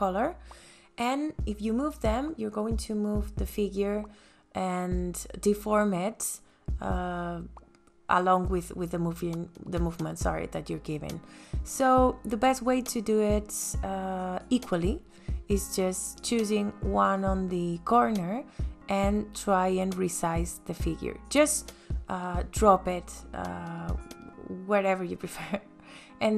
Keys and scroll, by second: 6.5 ctrl+z, 25.9 ,, 26.2 KP_Enter.